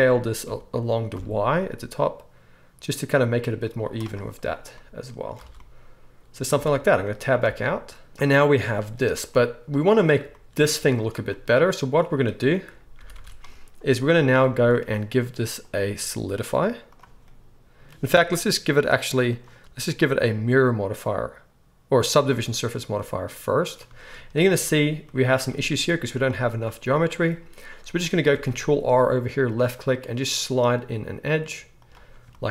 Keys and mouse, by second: 3.7-15.6 middle drag, 3.8 z, 5.4 alt+a, 6.5 Tab, 7.4 alt+a, 13.0 ctrl+s, 13.2 ctrl+s, 15.6-31.9 drag, 24.3 Tab, 28.3 ctrl+r, 31.9-32.5 middle drag.